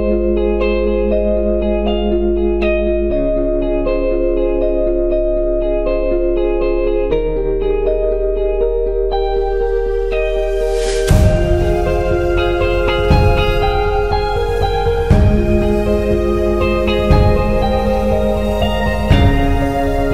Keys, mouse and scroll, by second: 2.9-4.3 middle drag, 4.3-7.4 drag, 15.4-20.0 drag.